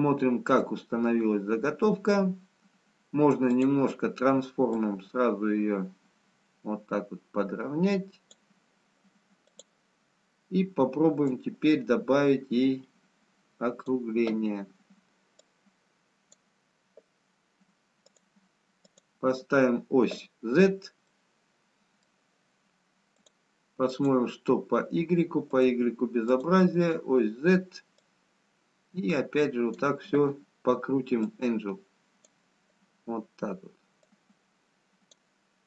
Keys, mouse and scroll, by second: 4.4 click, 5.1 click, 9.4 click, 11.4 click, 15.4 click, 18.1 click, 21.4 middle click, 21.4 scroll up 3, 23.2 click, 25.1 click, 25.5 click, 28.0 click, 34.2 click.